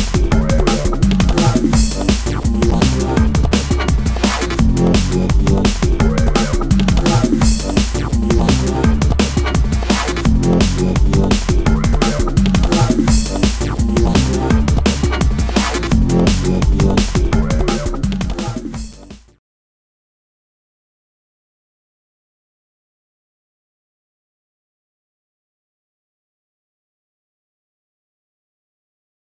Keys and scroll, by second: 16.7 super+t.